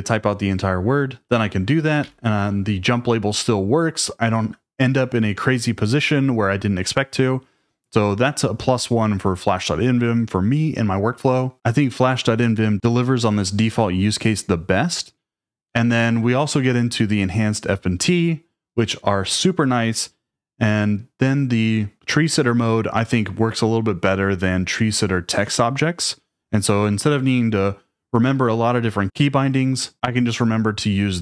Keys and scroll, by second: 2.0 d.